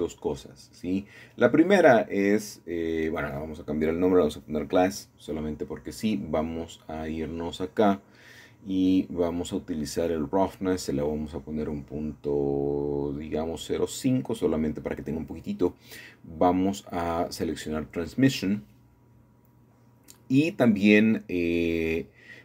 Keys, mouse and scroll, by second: 1.4 click, 2.8-4.0 drag, 4.0-4.6 typing, 4.8 Return, 8.0 shift+middle click, 8.2-9.6 shift+middle drag, 10.4-11.5 drag, 14.1 KP_5, 17.6-18.6 drag.